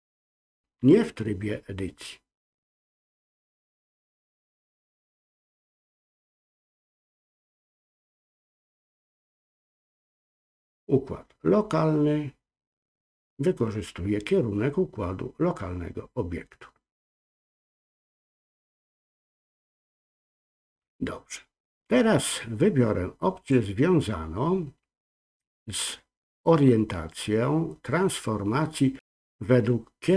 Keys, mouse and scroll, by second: 3.4-5.0 drag, 7.8-8.8 drag, 23.4-30.1 drag.